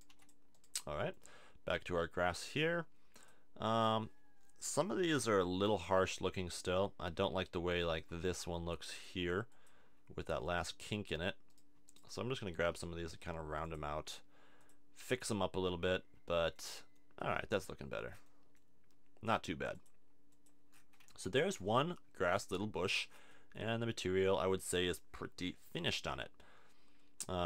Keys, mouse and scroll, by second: 0.1 x, 8.9 click, 10.2 click, 10.5 Tab, 11.5-12.6 drag, 12.6 r, 19.7 click, 20.7 middle click, 21.1 a, 21.3 Tab, 21.5 middle click.